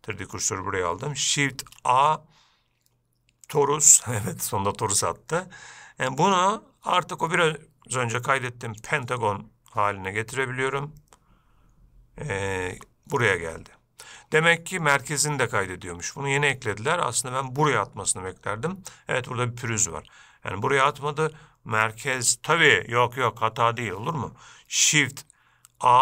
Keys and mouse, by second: 0.1-0.6 shift+middle drag, 6.7-9.2 drag, 13.0 g, 14.5 g.